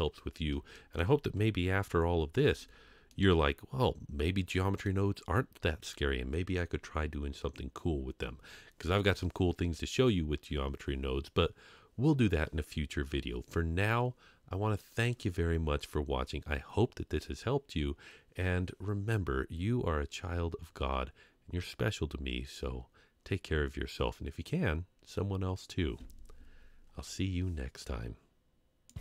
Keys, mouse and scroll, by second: 0.7 shift+middle click, 1.4 KP_Decimal, 2.5 Tab, 3.1-4.9 middle drag, 7.5-8.3 scroll down 3, 8.3-10.2 scroll up 1.